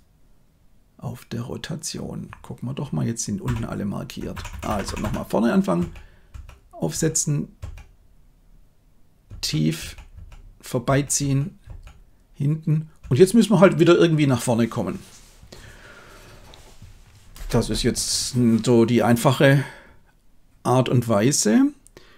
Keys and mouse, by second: 3.4 Left, 4.3 Left, 4.5 Left, 4.6 Left, 4.8 Left, 5.0 Left, 5.7 Right, 6.3 Right, 7.5 Right, 9.2 Right, 9.7 Right, 10.1 Right, 10.8 Right, 11.1 Right, 11.6 Right, 13.0 Right.